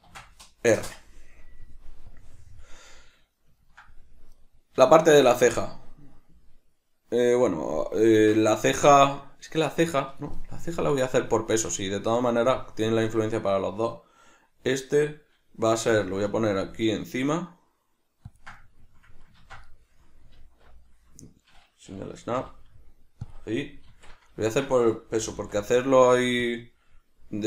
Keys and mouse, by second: 0.8 Return, 3.6-4.3 ctrl+middle drag, 4.3 right click, 4.9-10.7 shift+middle drag, 10.7 right click, 11.5 Tab, 12.1 right click, 15.9 g, 18.4 ctrl+click, 18.6-23.3 middle drag, 19.4 ctrl+z, 20.4 alt+q, 23.3 click, 23.9 alt+q, 24.4-26.5 ctrl+middle drag, 25.1 g, 26.5 click.